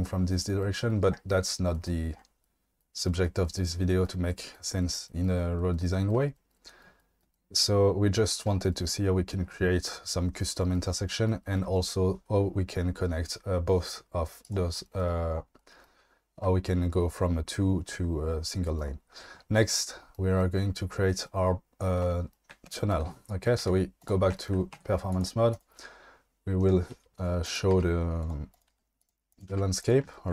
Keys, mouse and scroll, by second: 14.4 drag, 23.6 q, 24.7 Tab, 25.5 click, 26.6 click, 27.4 click, 27.7 g, 28.2 click, 28.5 click, 28.7 g, 29.0 click, 29.5 g, 29.8 click.